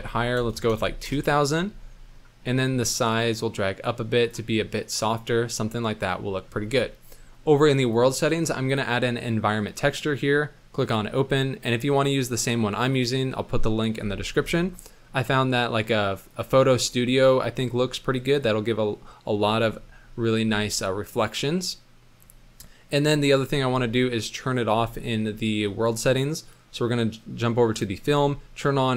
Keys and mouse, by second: 0.4 KP_0, 0.6 KP_0, 2.0 middle drag, 3.1-4.3 drag, 4.6-6.3 middle drag, 7.8 click, 8.7-10.8 drag, 19.9-20.4 middle drag, 20.9 middle drag, 21.1-22.1 middle drag, 24.9 middle click.